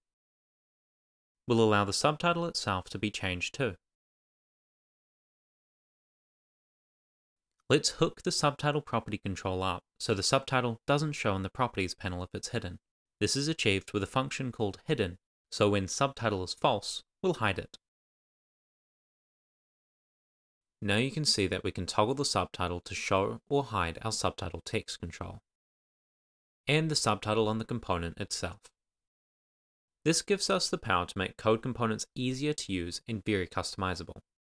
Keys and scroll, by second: 0.1 Right, 0.5 Return, 1.3 shift+;, 1.9 shift+h, 2.7 Right, 2.8 Down, 3.3 Return, 3.8 Tab, 4.0-7.4 typing, 4.1 Return, 7.3 Right, 7.6 Left, 8.5 Right, 8.8 shift+[, 8.9 Return, 11.6 shift+s, 13.5 super+s, 25.1 shift+r, 25.9 Tab, 26.8 Tab.